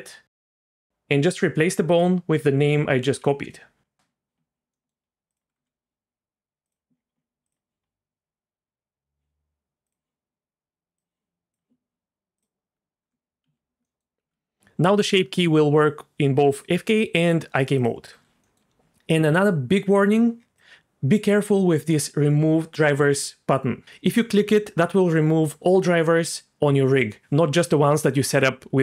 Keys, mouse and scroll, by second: 4.7 middle click, 5.3 click, 5.5 Tab, 6.6 click, 7.4 click, 9.8 click, 11.0 click, 12.4 click, 13.0 Tab, 13.4 z, 13.8 middle click, 14.2 g, 18.1 Tab, 18.4 middle click, 20.5 click.